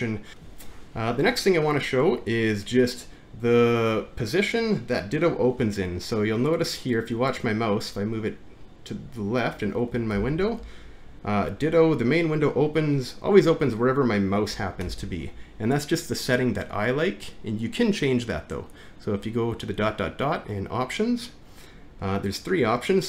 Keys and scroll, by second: 10.1 alt+`, 14.8 alt+`.